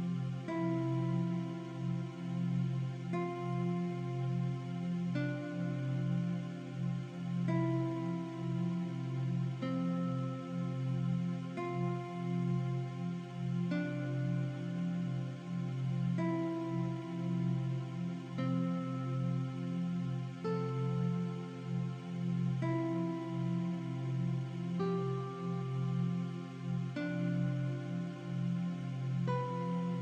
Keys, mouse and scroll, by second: 1.6 t, 2.0 click, 2.6 Caps_Lock, 2.8 typing, 3.8-4.3 typing, 5.7 click, 7.5 t, 8.0 click, 8.9-9.3 typing, 10.1 click, 11.2 click, 12.5-14.1 typing, 15.0 click, 15.4 alt+Left, 16.2 alt+Up, 18.9 alt+shift+click, 20.1 click, 21.3 click, 21.6 v, 21.6 click, 22.5 click, 22.8 m, 24.9 v, 25.0 click, 25.7 Left, 26.1 click, 27.7 scroll down 1, 27.9 scroll up 1, 28.5 alt+shift+scroll up 1, 29.2 click.